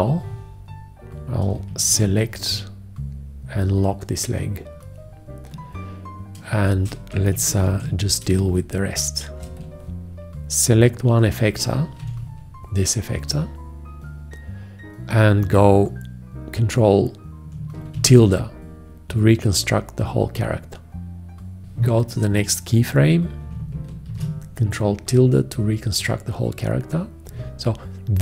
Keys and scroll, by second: 2.2 shift+1, 6.8 space, 8.0 ctrl+1, 8.6 space, 18.2 ctrl+`, 24.3 ctrl+`.